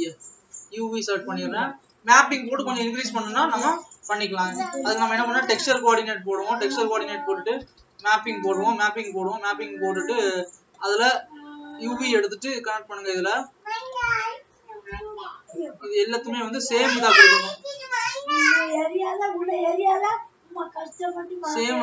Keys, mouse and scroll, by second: 0.2 click.